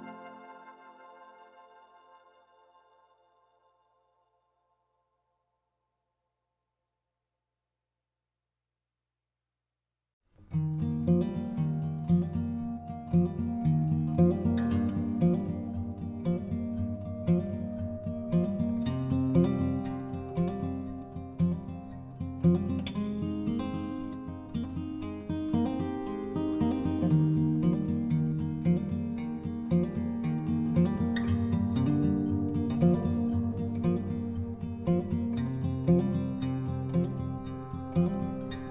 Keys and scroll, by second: 26.1 ctrl+z.